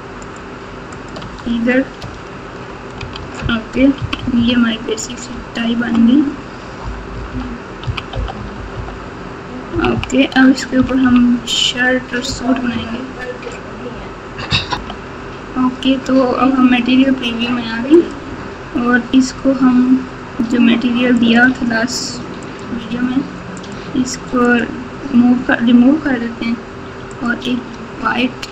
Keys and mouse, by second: 1.3 Tab, 3.1 alt+z, 3.9 KP_6, 4.1 KP_6, 4.3 KP_6, 5.3 KP_Subtract, 5.8 KP_Subtract, 6.1 KP_Subtract, 6.8-11.0 typing, 21.2 click, 23.6-24.6 drag, 27.1 click.